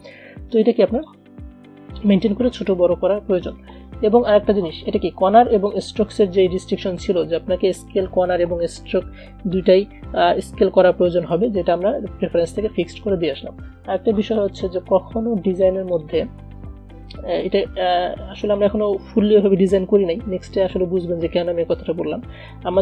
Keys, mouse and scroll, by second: 1.1 click, 3.6-7.0 drag, 10.0-13.8 drag, 13.8-15.8 drag.